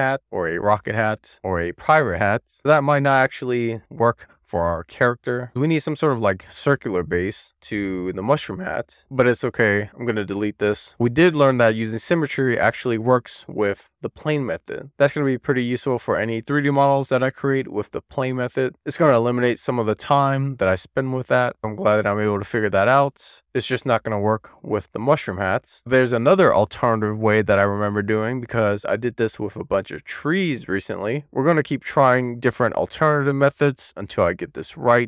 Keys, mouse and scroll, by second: 3.1-5.0 middle drag, 8.6 Tab, 9.3 a, 11.3 middle click, 26.9 shift+a.